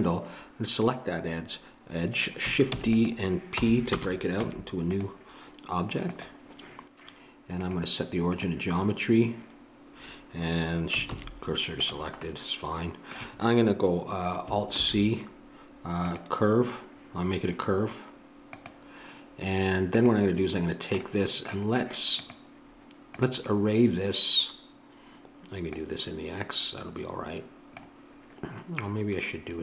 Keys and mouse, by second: 2.7 shift+d, 3.5 p, 4.4 Tab, 9.2-11.1 drag, 11.1 shift+s, 14.7 alt+c, 18.5-21.6 drag, 21.6-23.8 middle drag, 23.8-29.6 drag.